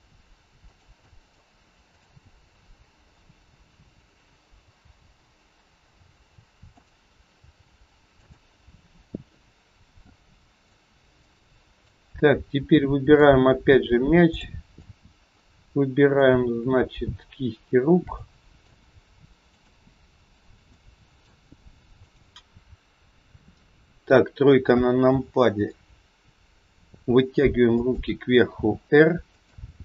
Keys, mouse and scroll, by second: 1.0 middle click, 1.9 click, 2.4 middle click, 3.7 KP_3, 4.8 g, 9.4-10.4 scroll up 2, 10.5 click, 11.2 middle click, 12.2-12.6 scroll up 1, 12.6 middle click, 14.3 click, 14.6 middle click, 14.6 scroll up 1, 16.0 shift+click, 18.0 middle click, 19.4 shift+click, 20.7 middle click, 22.3 shift+click, 22.4 scroll down 2, 23.0 KP_3, 23.5-25.0 scroll down 2, 25.0 g.